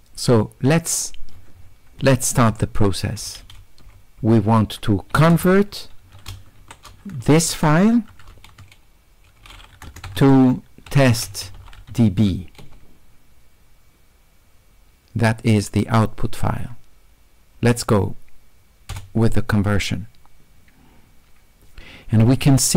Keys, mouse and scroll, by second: 0.2 middle click, 0.7 middle click, 0.8 middle click, 1.3 middle click, 1.6 middle click, 1.8-2.6 scroll down 1, 5.4 space, 6.6 w, 8.4 q, 9.9 space, 10.3 space, 11.0 e, 12.0 d.